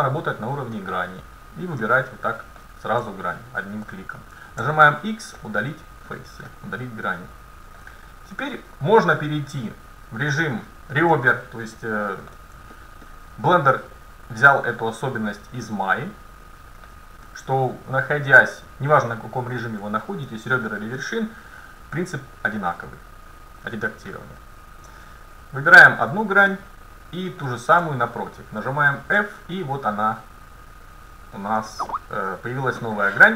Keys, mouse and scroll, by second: 0.0 ctrl+Tab, 1.9 middle click, 3.5-5.4 right drag, 4.6 x, 6.1 middle click, 9.7 ctrl+Tab, 11.2-13.1 middle drag, 14.1-15.5 middle drag, 16.2 middle click, 19.2 middle click, 20.7 middle click, 21.9 middle click, 22.1 middle click, 25.7-30.0 right drag, 26.5-28.4 middle drag, 29.2 f, 30.8-32.7 right drag, 31.4 middle click, 31.7 click, 32.7 middle click.